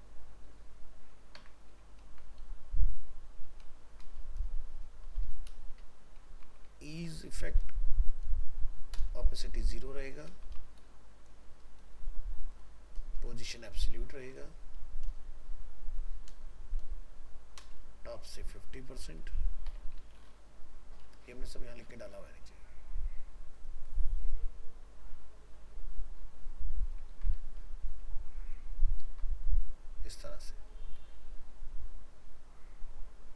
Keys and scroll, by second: 2.0 ctrl+s, 3.8 ctrl+shift+Left, 27.1 ctrl+c, 28.7 ctrl+v.